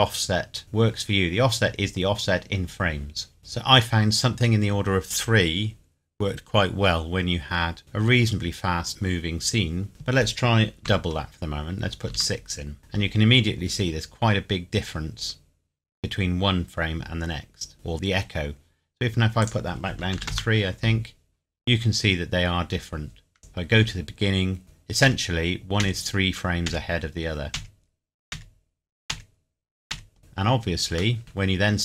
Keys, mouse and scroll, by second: 3.4-4.2 scroll up 1, 9.9 click, 10.8 KP_6, 12.1 KP_Enter, 14.2 scroll down 1, 19.4 click, 20.1 KP_3, 20.3 KP_Enter, 22.3 scroll down 1, 23.4 click, 24.3 scroll up 1, 24.6 Right, 30.2-30.9 scroll down 1, 31.2 shift+scroll down 1, 31.5-31.8 scroll up 1.